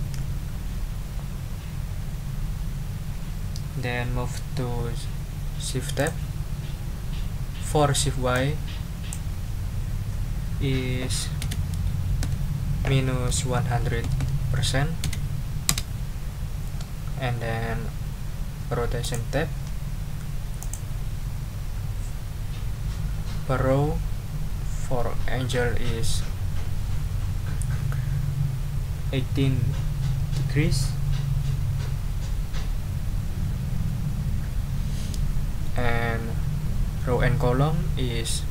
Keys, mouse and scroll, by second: 6.0 click, 8.3 click, 11.4 BackSpace, 12.2 -, 13.3 1, 13.8 0, 15.0 BackSpace, 15.7 Return, 19.0 click, 20.6 click.